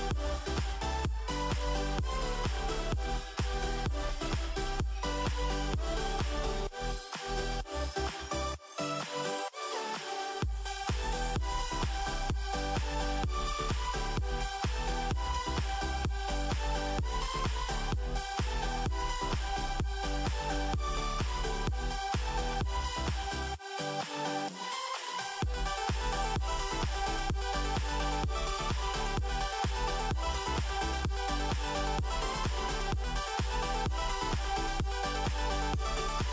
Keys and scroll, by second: 0.9-2.2 typing, 3.3 a, 5.5-6.6 typing, 9.7 typing, 12.6-14.7 typing, 16.3-19.2 typing, 20.6 -, 21.6-24.5 typing, 25.8 typing, 27.3-28.1 typing, 32.8 n, 34.1 -.